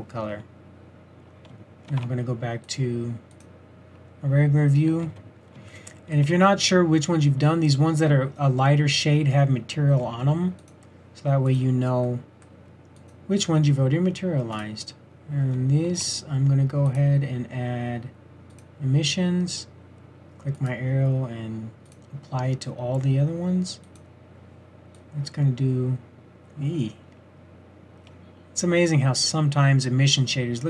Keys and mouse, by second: 1.9 shift+z, 5.0 z, 5.7-6.0 middle drag, 10.6-11.9 drag, 15.9 shift+z, 16.5 shift+z, 20.6-22.4 drag, 21.0-22.7 typing, 23.9-25.1 drag, 24.8-25.9 typing.